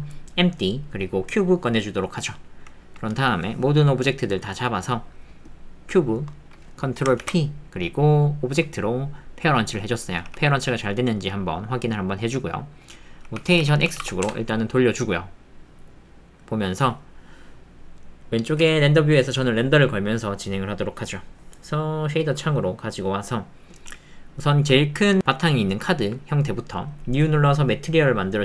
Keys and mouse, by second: 2.2 click, 4.3 middle click, 6.3 middle click, 10.2 g, 12.5 middle click, 14.2 KP_Enter, 15.8 click, 15.8 middle click, 16.0 click, 16.2 middle click, 18.6 z, 21.3 click, 22.9 middle click, 24.7 ctrl+click, 25.8 ctrl+click, 27.7 click, 28.3 click.